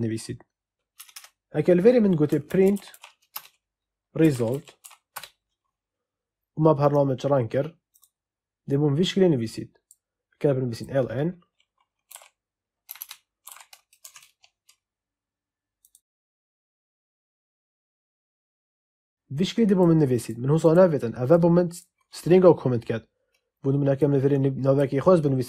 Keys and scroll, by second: 0.9 Return, 2.0-5.2 typing, 12.0 k, 12.8 BackSpace, 13.3 l, 13.9 Escape.